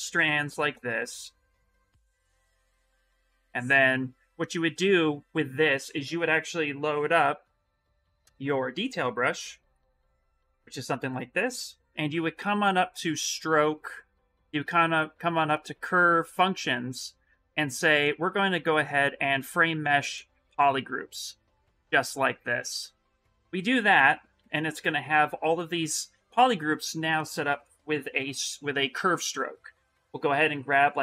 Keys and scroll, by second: 2.0 2, 20.3 shift+m, 22.2 shift+m, 24.1 s.